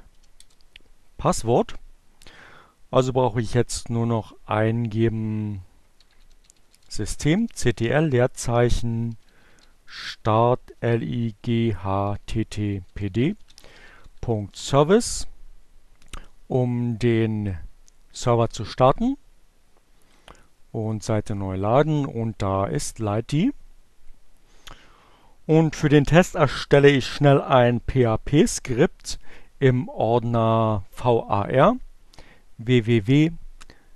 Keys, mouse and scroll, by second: 4.1-14.4 typing, 16.9 click, 19.5 right click, 20.3 click, 22.6 click.